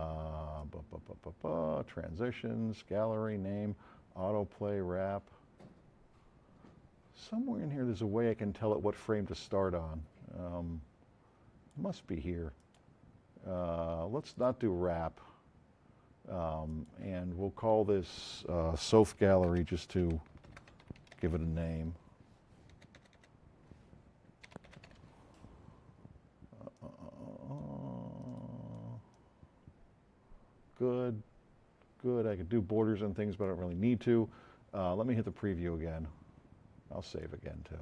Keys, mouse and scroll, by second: 0.5-2.1 drag, 14.3 click, 19.1-22.9 typing, 24.2-25.5 typing, 26.7 click, 28.2 click, 37.1 click.